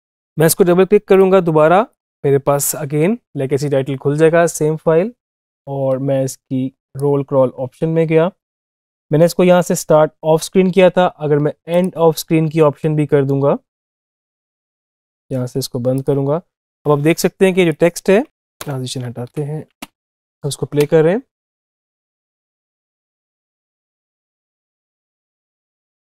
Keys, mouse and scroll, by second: 1.0 click, 6.7 click, 11.5 click, 14.2 click, 19.1 Up, 20.6 space.